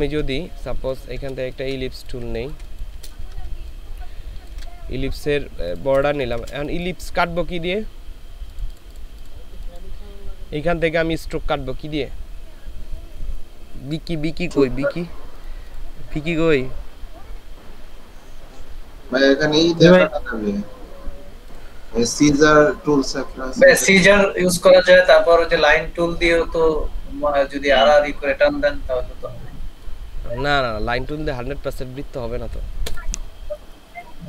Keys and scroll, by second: 1.4 ctrl+space, 3.5 ctrl+shift+space, 6.3 ctrl+space.